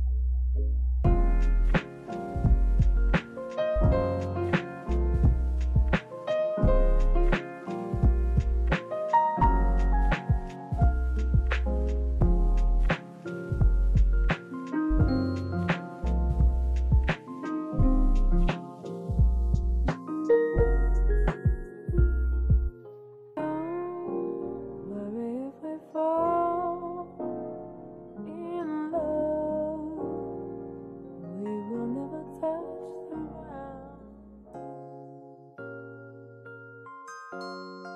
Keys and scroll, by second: 0.4 space, 1.5 s, 3.0 space, 4.1 space, 5.2 space, 8.7 space, 10.8 space, 14.2 space, 15.8 space, 17.3 space, 18.7 space, 19.5 space, 21.5 space, 22.3 space, 25.5 space, 28.5 space, 33.0 space, 33.8 space, 37.8 space.